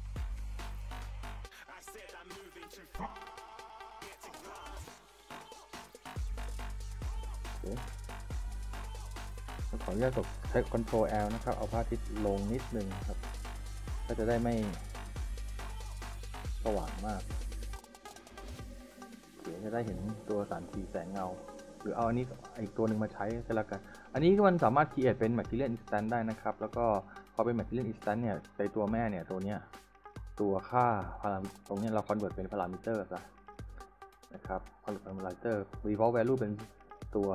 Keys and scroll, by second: 8.6 w, 11.7 ctrl+l, 20.0 s.